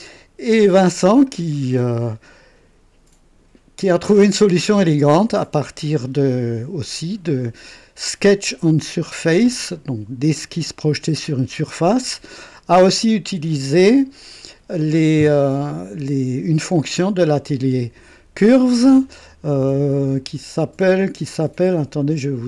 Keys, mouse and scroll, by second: 1.2-5.7 drag.